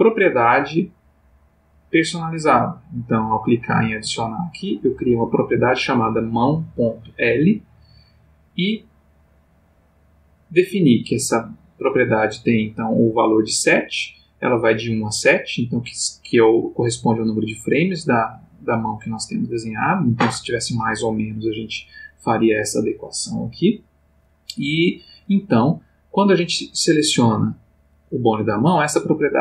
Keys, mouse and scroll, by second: 8.4 click, 24.6 Escape, 26.8 click.